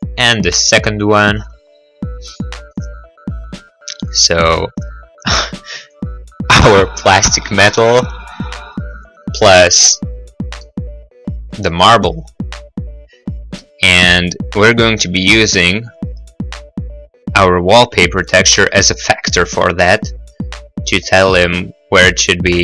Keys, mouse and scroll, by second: 0.0 click, 6.0 click, 9.0 click, 10.8 middle click, 11.2 middle click, 11.2-12.3 scroll, 11.8 middle click, 12.0 middle click, 12.8 scroll, 13.6 middle click, 13.6 middle click, 15.3 click.